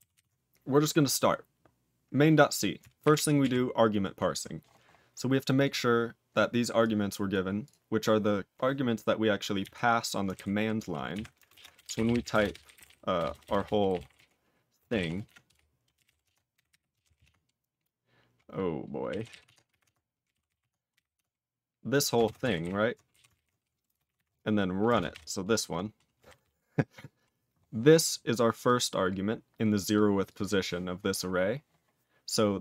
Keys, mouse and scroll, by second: 0.1 ctrl+s, 3.0 ctrl+n, 3.1 ctrl+f, 3.4 ctrl+f, 5.5 click, 6.8 click, 7.2 click, 7.6 click, 9.7 F5, 10.3 ctrl+g, 11.1 F5, 11.4 ctrl+space, 11.5 ctrl+a, 11.5-17.6 typing, 18.8-21.4 typing, 22.2 ctrl+space, 22.4 ctrl+alt+b, 22.6 ctrl+alt+b, 23.1 alt+w, 23.3 ctrl+e, 23.8 space, 24.0 shift+7, 24.1 shift+7, 24.8 space, 25.1 ctrl+y, 25.9-26.9 typing, 28.6 click, 29.8 click, 30.2 click.